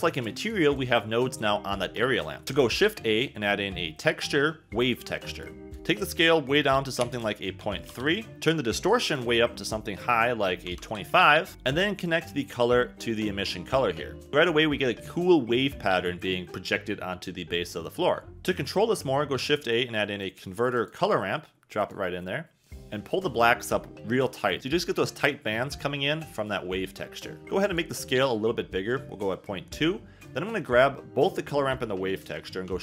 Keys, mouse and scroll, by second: 0.4 click, 0.7 click, 2.8 shift+a, 5.7 click, 9.0-11.1 drag, 19.3 shift+a, 21.8 click, 23.0-24.6 drag, 27.6 click, 29.4 click, 32.6 shift+d.